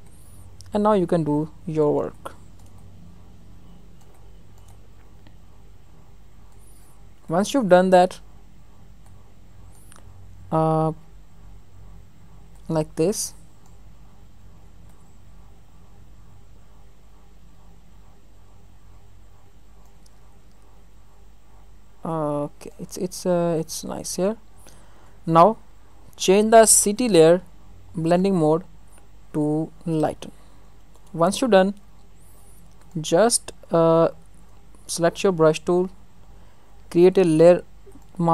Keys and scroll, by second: 10.0 ctrl+alt+z, 20.9 ctrl+alt+z.